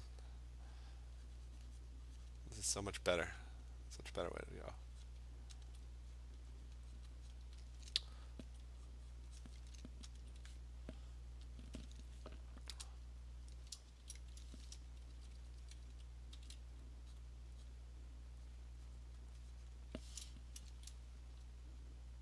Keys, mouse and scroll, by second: 0.1 click, 0.1-1.5 alt+click, 0.2 click, 0.8 click, 1.4 click, 2.3 click, 3.7 click, 4.3 click, 5.1 click, 5.7-6.2 alt+click, 6.2 click, 6.7 click, 7.0 click, 7.4 click, 8.5 alt+click, 8.9 click, 9.2 click, 9.4 click, 10.2 alt+click, 11.6 click, 13.0 click, 13.9 Return, 15.2-16.4 typing, 17.2 click, 17.7 click, 18.6 click, 19.1 click, 19.3 click, 19.7 click.